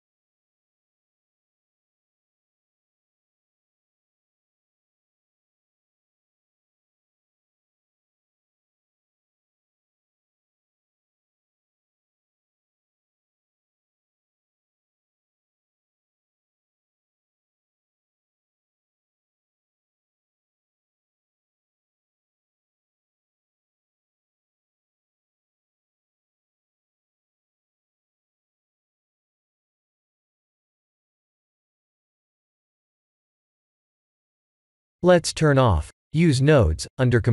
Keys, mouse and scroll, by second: 10.0 click, 12.5 click, 18.1 click, 20.9-21.2 scroll up 3, 27.4-27.8 scroll down 2, 30.0 ctrl+s, 30.7 click, 31.3 click, 32.1 click, 33.5 click, 36.7 click.